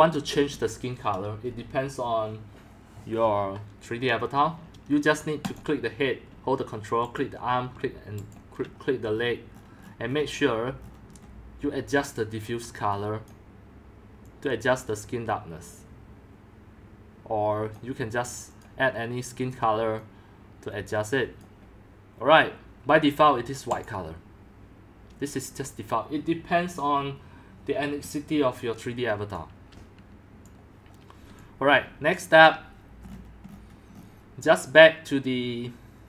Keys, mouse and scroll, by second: 5.5 click, 6.3-7.1 ctrl+drag, 8.0 ctrl+click, 8.3 ctrl+click, 9.1-12.0 scroll down 25, 12.0 click, 13.0 click, 14.2-17.8 drag, 18.6-28.9 drag, 29.5 click, 31.2-32.9 typing, 33.0-35.2 scroll up 16, 35.2 scroll down 10, 35.4-36.0 scroll up 1.